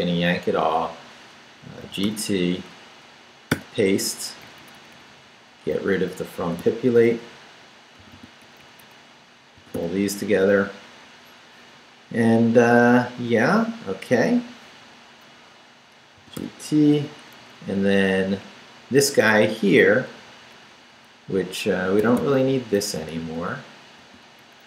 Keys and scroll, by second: 1.6-3.5 typing, 4.2 Down, 5.5 Up, 6.4 d, 7.0 Up, 8.0 d, 8.4 Up, 9.6 d, 10.6 Down, 16.0-16.9 typing, 17.4 Down, 19.9 Down, 22.0 d, 22.6 Up, 23.0 Right, 24.0 x, 24.4 Up.